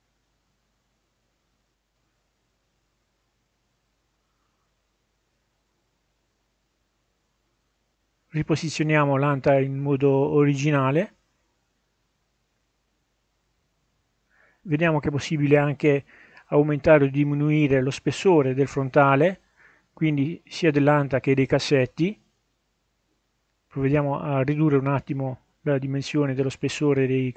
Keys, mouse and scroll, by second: 1.8 scroll up 1, 7.9-9.2 drag, 10.6-12.5 drag, 16.9-18.8 drag, 19.3 middle click, 20.3 scroll down 1, 20.7 middle click, 21.0-22.2 scroll up 2, 24.2 click, 24.7 click.